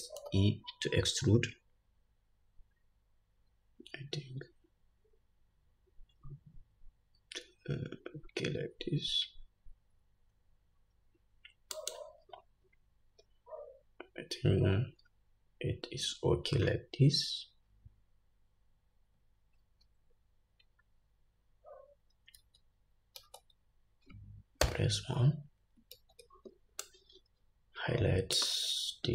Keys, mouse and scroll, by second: 0.4 e, 22.5 alt+z, 23.4 alt+z, 24.8 1, 26.1 alt+z, 27.1-29.1 drag.